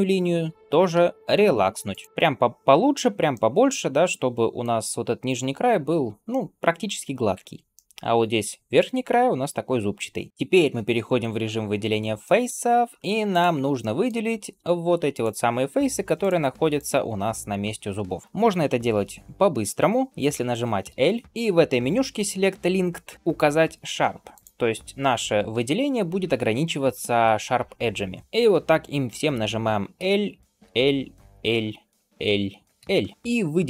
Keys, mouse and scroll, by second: 0.8 q, 3.2-4.5 middle drag, 6.1 middle click, 7.6 middle click, 9.8 middle click, 10.3 3, 12.1 shift+middle click, 12.6-13.1 scroll up 1, 13.1 click, 13.6 middle click, 15.0 shift+click, 16.0 shift+click, 16.6 shift+click, 21.2 alt+KP_2, 21.2 click, 24.2 click, 28.2 shift+middle click, 28.2 scroll down 2, 29.8 l, 30.5 l, 33.1 middle click.